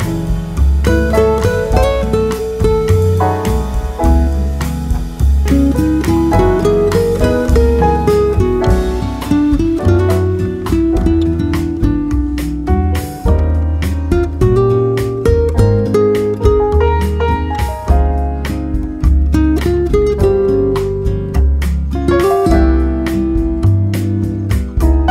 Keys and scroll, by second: 0.2 Delete, 0.6 ctrl+v, 6.8 F5.